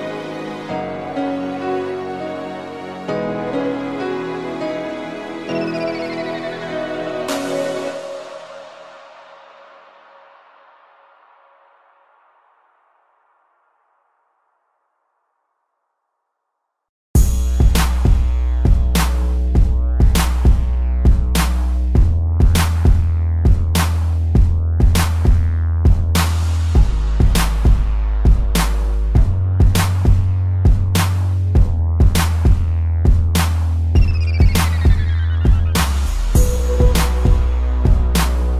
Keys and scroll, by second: 2.2 space, 10.6 p, 23.1 space, 26.4 space, 30.3 ctrl+z, 33.0 space, 35.9 space, 37.9 space.